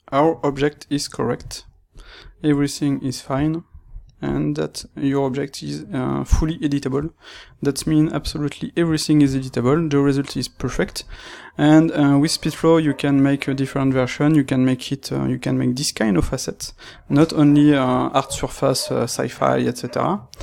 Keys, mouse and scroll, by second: 1.8 click, 5.3-20.4 middle drag.